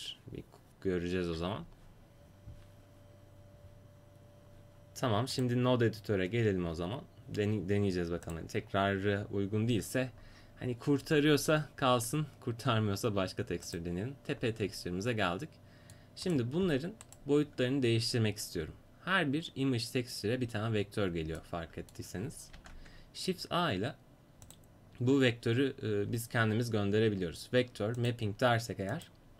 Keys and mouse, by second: 5.4-16.3 drag, 16.3 middle click, 17.1-22.6 right drag, 22.6 shift+a.